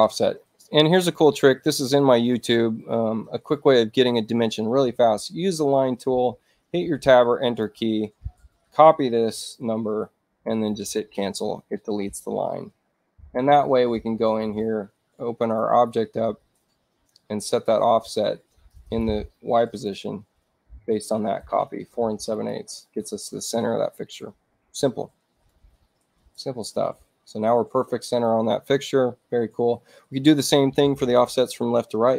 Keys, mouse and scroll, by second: 7.2 Return, 9.9 ctrl+c, 10.5 click, 14.2 right click, 15.4 click, 18.6 click, 20.7 ctrl+v, 22.3 click, 25.5-28.2 drag.